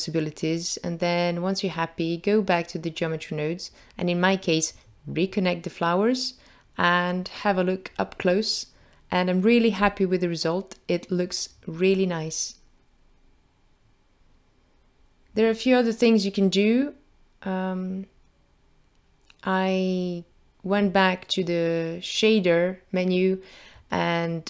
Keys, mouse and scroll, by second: 0.2-0.8 scroll down 4, 0.8 middle click, 1.7 middle click, 4.6 click, 5.9 click, 8.4 click, 13.4-14.3 scroll down 2, 16.9 click, 19.4 click, 22.5 click.